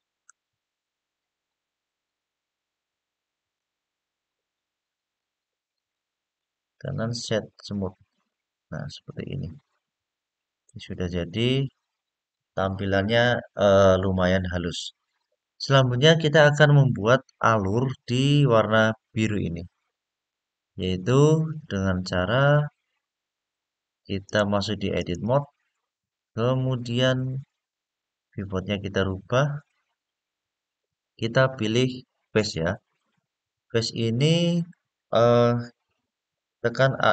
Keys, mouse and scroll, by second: 1.7-2.3 scroll down 1, 2.3-3.3 scroll up 3, 3.3-4.9 middle drag, 5.5 click, 6.1-8.0 drag, 6.1 right click, 9.6-10.4 scroll down 2, 10.4-11.4 middle drag, 11.8 scroll up 1, 19.8-20.1 scroll up 2, 20.1-21.4 scroll down 3, 24.0-24.9 drag, 25.9-26.3 scroll up 2, 27.9 click, 30.4-31.2 scroll up 1, 32.1 click, 33.6-34.0 scroll up 2, 34.3-35.7 scroll down 1.